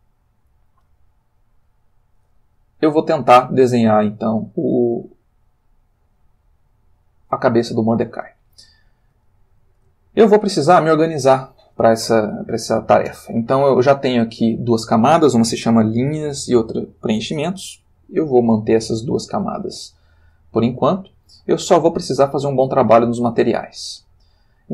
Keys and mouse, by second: 7.8 ctrl+middle click, 9.3 shift+middle click, 9.9 ctrl+shift+middle click, 10.9 shift+middle click, 21.5 click.